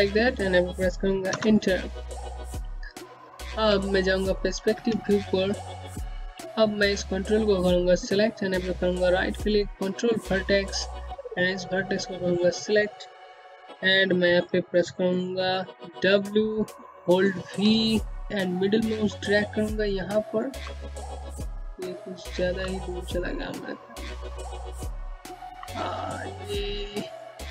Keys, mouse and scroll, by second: 2.5-2.9 scroll down 1, 2.9 click, 3.4 space, 4.3 scroll down 1, 4.6 alt+click, 5.1-5.5 scroll up 1, 5.7 alt+click, 6.5 right click, 9.3 click, 13.4 click, 14.4 middle click, 15.7 middle click, 17.4-18.5 typing, 19.7 middle click, 19.9-23.2 typing, 20.5-21.5 scroll down 2, 22.2 middle click, 23.6-24.1 scroll up 1, 24.8 scroll down 1, 25.9-27.3 typing, 26.2 middle click.